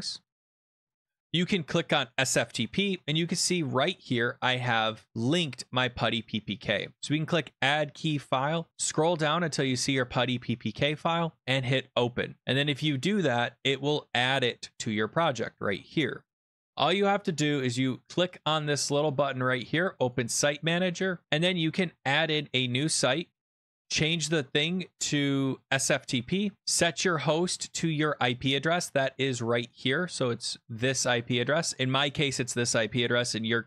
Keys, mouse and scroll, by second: 0.9 click, 2.1 click, 3.1 click, 5.6 click, 7.0 click, 8.1-8.9 scroll down 21, 8.9 scroll, 9.3-11.5 click, 12.4 click, 15.9 click, 16.7 click, 20.1 click, 22.3 click, 23.9 click, 25.6 click, 26.6 click, 27.2 click, 29.3 click.